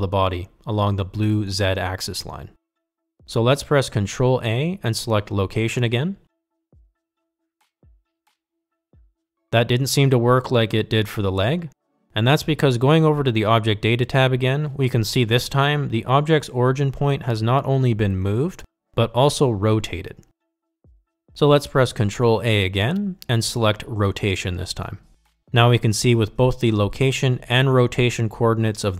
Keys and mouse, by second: 6.7 ctrl+a, 17.3 click, 17.7 click, 23.7 ctrl+a.